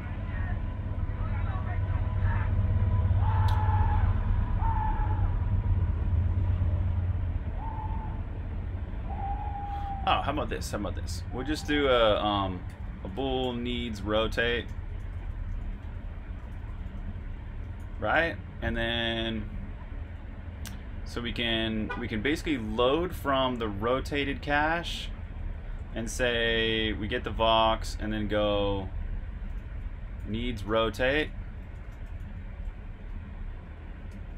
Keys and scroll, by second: 0.8 j, 9.8-11.6 typing, 13.9-14.8 typing, 21.4-22.1 typing, 24.1-26.5 typing, 28.9-33.8 typing.